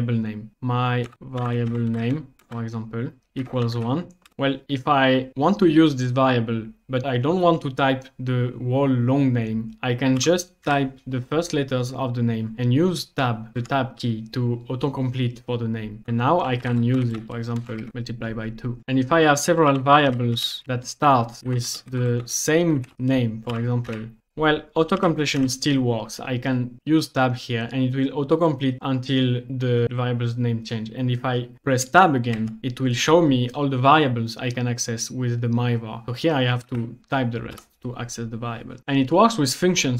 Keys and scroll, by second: 0.9-3.7 typing, 4.3 Return, 10.2-10.6 typing, 13.6 Tab, 16.6 typing, 17.8 shift+2, 17.9 Return, 19.4-25.5 typing, 22.9 Return, 26.8 Tab, 32.4 Tab, 36.7 1, 37.5 Return.